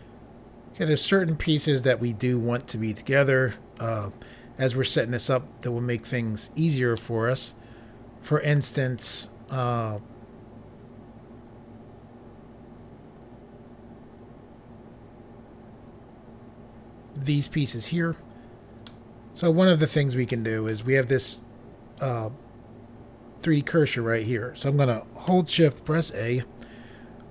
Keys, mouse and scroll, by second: 5.6 click, 6.9 middle click, 18.8 middle click, 20.2 middle click, 25.8 a.